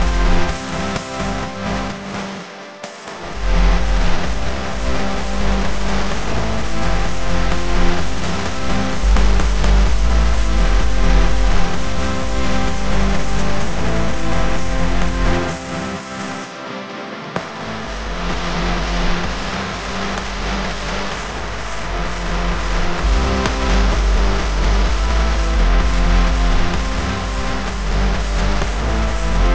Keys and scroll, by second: 0.5 space, 1.1 a, 13.3 v, 14.7 a, 19.3 q, 26.8 v, 27.7 space, 28.2 alt+super+space, 28.3 alt+super+space, 28.9 super+space.